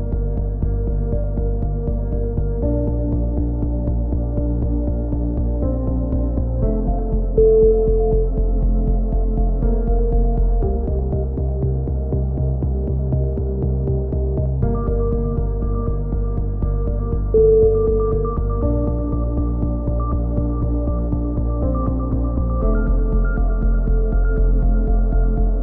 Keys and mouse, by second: 0.1-1.4 drag, 0.3 Tab, 1.5-2.7 middle drag, 1.7 Tab, 2.7-3.8 drag, 4.3 right click, 5.0 KP_3, 5.5 z, 6.1 z, 6.5 z, 9.5 f, 10.3 a, 10.4 z, 10.6-11.6 drag, 13.8 KP_3, 14.2 z, 14.3-15.9 middle drag, 16.2 ctrl+r, 18.8 click, 19.4 a, 19.6 c, 20.5-22.0 drag, 22.1 a, 22.3 z, 22.5-23.5 drag, 24.3 middle click, 24.6 z, 24.8 click.